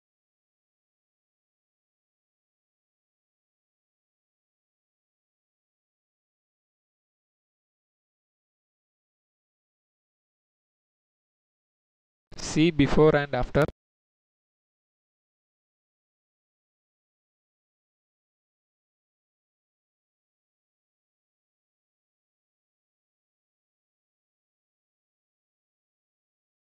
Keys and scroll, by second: 5.0-6.9 typing, 8.2 Return.